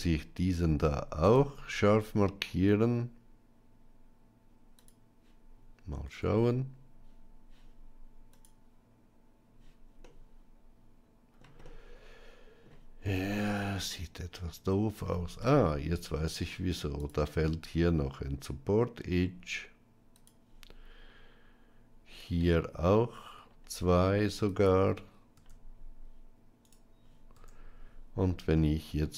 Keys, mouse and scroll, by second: 1.3-5.0 right drag, 5.9 Tab, 8.2 click, 9.9-11.3 middle drag, 11.5-12.5 middle drag, 13.0 Tab, 15.0 middle click, 16.3 ctrl+r, 22.3 ctrl+r, 27.2 Tab, 28.6-29.1 middle drag.